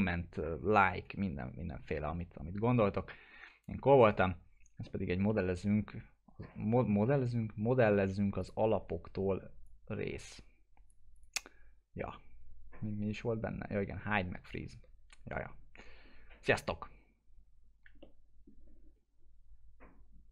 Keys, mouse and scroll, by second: 4.8 middle click, 5.2-7.3 alt+middle drag, 7.3 scroll up 1, 8.4 click, 8.9 w, 9.6-11.1 drag, 11.7 scroll down 1, 18.0-20.3 alt+middle drag.